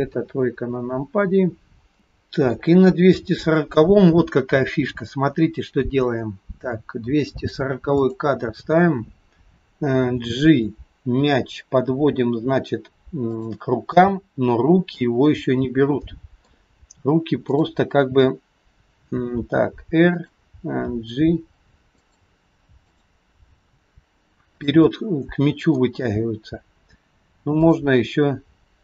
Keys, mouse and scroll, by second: 0.1 KP_3, 1.9-2.7 scroll up 5, 2.7 shift+middle click, 3.4 click, 8.0 click, 10.1 g, 14.0 middle click, 17.5 middle click, 17.5 click, 19.5 r, 21.0 g, 23.0 click, 23.6 g, 24.9 middle click, 24.9-25.4 scroll up 1, 27.6 click.